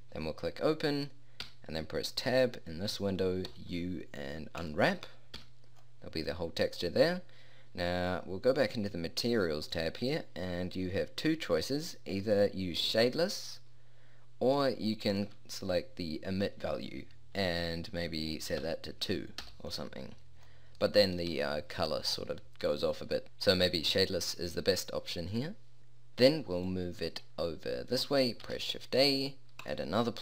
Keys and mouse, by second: 1.5 Tab, 3.5 u, 5.4 Tab, 26.7 click, 28.5 shift+a.